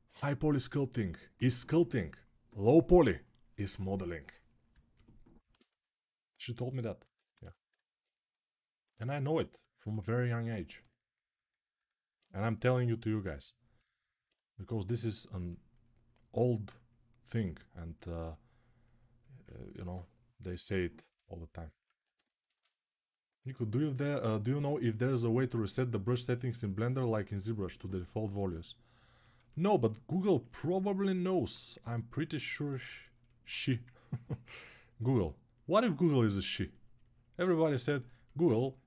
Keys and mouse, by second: 7.2 g, 7.8-30.2 right drag, 30.2-38.3 ctrl+alt+drag, 33.3 1.